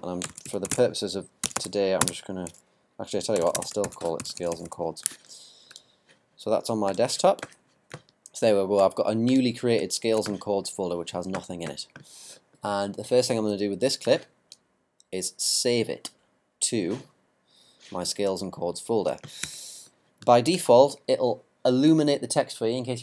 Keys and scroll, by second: 0.4 shift+c, 3.2-4.7 typing.